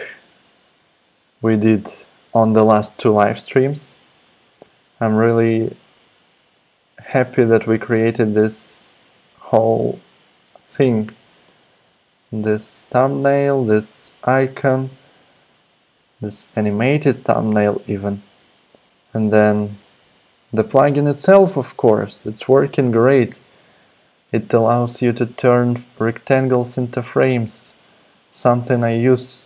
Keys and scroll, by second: 29.2-29.4 scroll up 1.